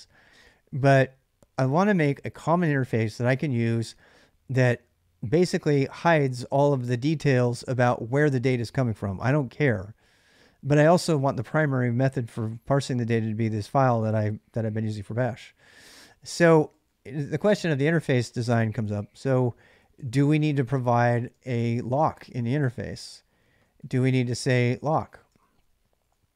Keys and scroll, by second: 15.3-20.6 typing, 21.3 Tab, 21.8-26.3 typing.